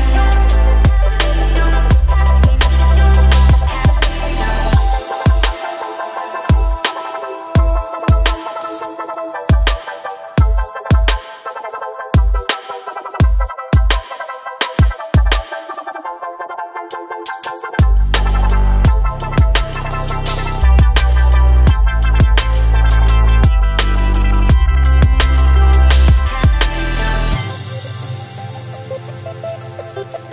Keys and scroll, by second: 3.8 Tab, 22.9 Tab, 26.8 Tab.